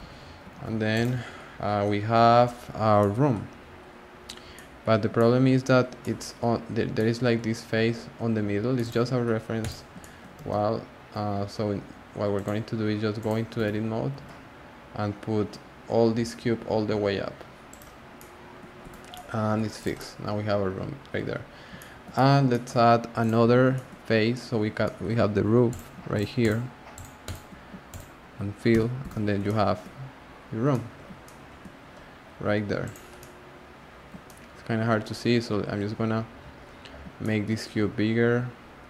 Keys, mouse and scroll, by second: 0.0 Tab, 0.1-1.2 scroll down 9, 0.5 alt+z, 0.9 click, 1.2 scroll up 1, 1.3-2.1 scroll down 8, 2.1-2.5 scroll up 2, 2.5-3.0 scroll down 4, 3.0-3.5 middle drag, 3.5-4.5 scroll down 11, 4.5-6.6 middle drag, 6.6 scroll down 1, 6.6-6.9 scroll up 1, 6.9-7.4 middle drag, 7.4-7.8 scroll down 3, 7.8 scroll up 1, 7.8-8.7 scroll down 2, 8.7 middle click, 9.6 click, 10.0-10.3 shift+middle drag, 10.3 g, 13.3 click, 13.5 Tab, 14.1 g, 18.8 Tab, 19.1-19.8 middle drag, 19.8 click, 19.9-21.3 middle drag, 21.3 scroll down 1, 21.4 scroll up 1, 21.4-21.8 scroll down 1, 21.8-23.2 shift+middle drag, 23.2 click, 23.4 Tab, 23.7-25.7 shift+middle drag, 25.7 click, 26.1 shift+click, 26.4 shift+click, 26.9 shift+click, 27.2 shift+click, 27.9 shift+click, 28.7 f, 29.0 Tab, 29.4 shift+middle click, 29.9-30.7 scroll up 4, 30.7-32.8 middle drag, 32.8 click, 33.2-35.1 middle drag, 35.1 scroll down 1, 35.1-35.5 scroll up 3, 35.5 scroll down 2, 35.8 scroll up 1, 35.9-36.6 scroll down 5, 36.6 scroll up 1, 36.7-37.2 scroll down 2, 37.2-37.8 shift+middle drag, 37.8 s.